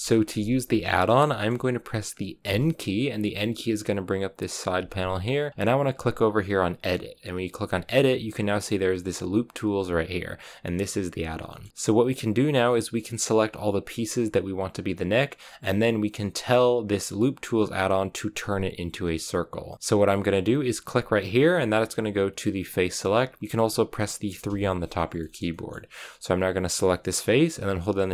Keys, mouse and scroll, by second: 2.3 n, 11.4-20.2 shift+middle drag, 20.2-22.6 scroll up 1, 22.6 click, 23.4-26.8 middle drag, 26.8-28.1 right drag.